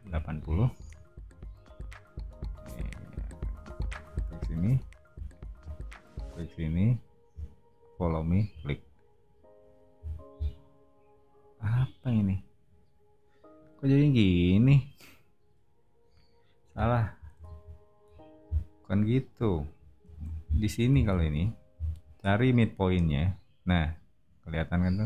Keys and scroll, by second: 0.0-0.9 typing, 4.6 space, 9.9 o, 17.4 super+z, 20.1 super+z, 21.0 super+z, 21.7 l.